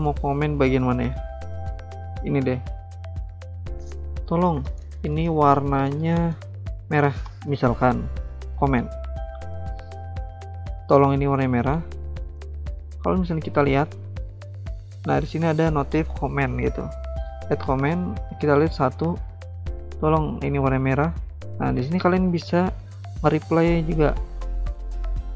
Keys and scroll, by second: 3.9-7.7 typing, 11.8 alt+Tab.